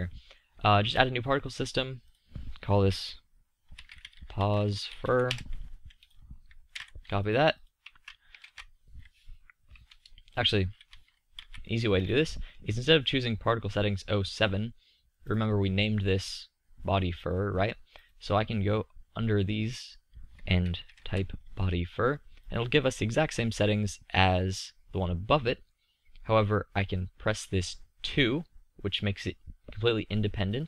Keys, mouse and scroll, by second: 0.8-5.3 drag, 6.0-9.3 drag, 15.1-16.9 drag, 17.1-21.1 drag, 24.3-26.7 middle drag, 27.9-30.6 drag.